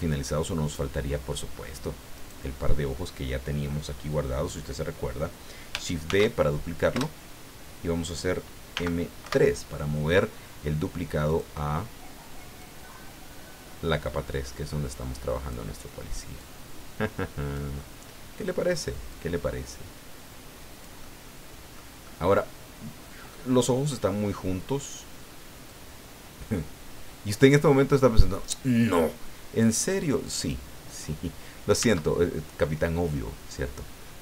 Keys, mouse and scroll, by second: 0.6 click, 2.1 right click, 6.1 shift+d, 7.0 Return, 8.7 m, 9.2 3, 11.3 click, 12.6-15.7 drag, 16.4-17.7 drag, 17.8-18.6 middle drag, 19.1-21.9 drag, 21.0-21.9 middle drag, 22.0-23.5 middle drag, 25.7-28.6 drag, 29.6-30.7 drag, 31.8 Tab.